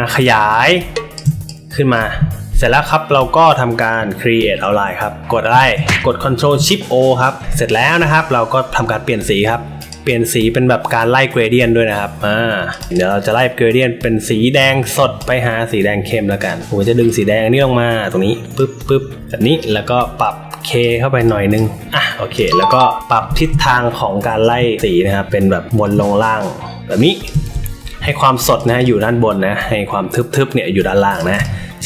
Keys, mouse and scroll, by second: 0.5 shift+click, 1.4 click, 5.6 ctrl+z, 9.7 click, 12.7 click, 12.8 click, 15.1-16.4 drag, 17.0-18.5 drag, 20.2-20.7 drag, 21.2 click, 22.3 click, 25.2 shift+click, 25.8-27.2 shift+drag, 28.5 click, 28.7 click, 31.1 click, 31.3 space, 31.4 click.